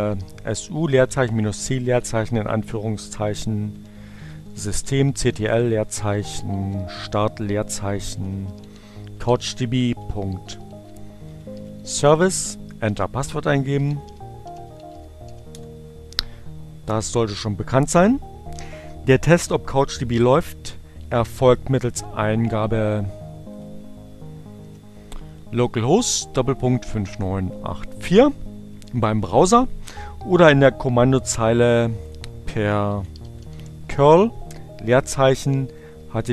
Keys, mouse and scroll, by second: 0.0-1.3 typing, 2.6-14.4 typing, 15.6 Return, 22.8 click, 23.2 l, 25.6 Down, 26.0 Return, 32.0 click, 32.2-34.3 typing, 36.2 shift+..